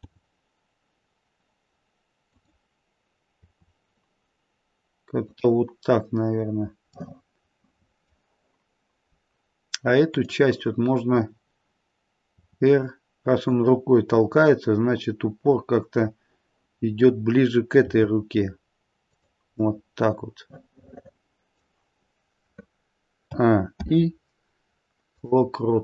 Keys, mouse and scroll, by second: 0.0 g, 3.4 r, 6.9 middle click, 10.1 click, 12.3 r, 17.8 r, 19.6 middle click, 23.7 a, 23.7 i.